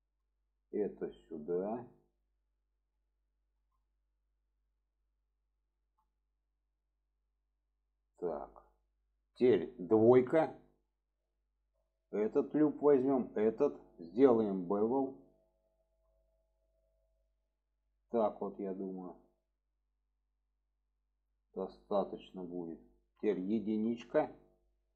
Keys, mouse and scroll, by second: 0.3-0.8 drag, 1.2 click, 2.9-3.2 drag, 3.3 shift+middle click, 4.4 shift+middle click, 5.6 shift+middle drag, 8.2 shift+middle drag, 11.1 click, 14.6 click, 15.5-21.3 drag, 22.2 click, 23.2 shift+middle click.